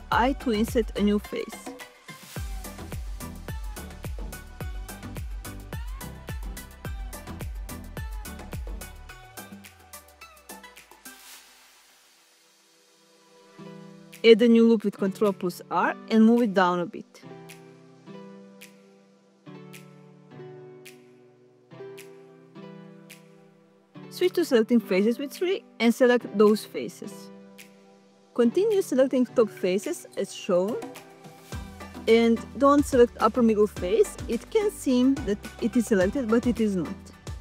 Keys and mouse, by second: 2.3 click, 7.7 middle click, 14.6 ctrl+r, 14.9 click, 24.7 middle click, 27.4 alt+shift+click, 32.1 alt+shift+click.